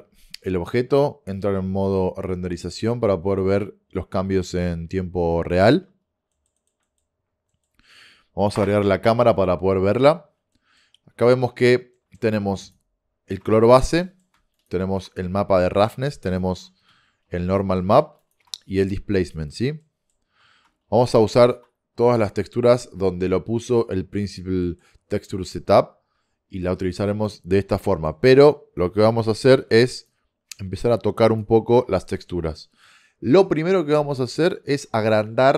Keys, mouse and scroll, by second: 1.4 click, 6.4-10.0 middle drag, 8.6 KP_0, 12.9 click, 14.1 middle click, 14.7 middle click, 18.4-20.2 middle drag, 21.5-23.2 middle drag, 24.4-28.0 middle drag, 29.5 b, 29.7 click, 30.6 g, 31.7-33.8 middle drag.